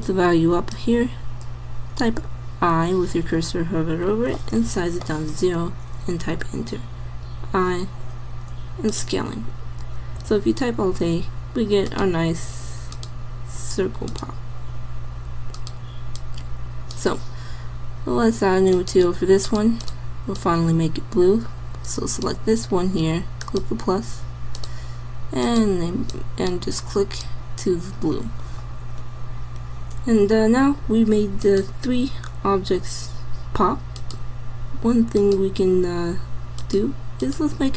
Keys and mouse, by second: 1.4 middle click, 2.0 i, 2.8 i, 4.7 s, 7.3 i, 10.3 alt+a, 11.9 click, 18.0 middle click, 34.0-37.7 drag.